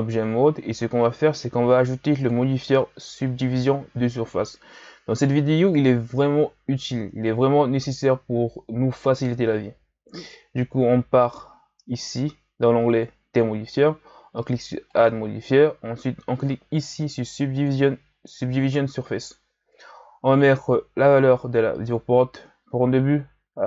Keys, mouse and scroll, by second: 2.2 click, 17.6 click, 21.0-23.6 drag.